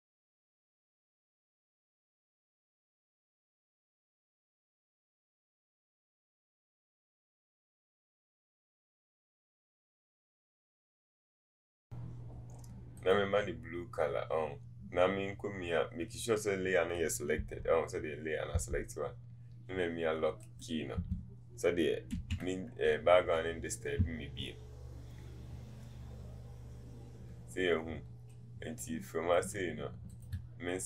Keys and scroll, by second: 10.4 typing, 10.6 Return.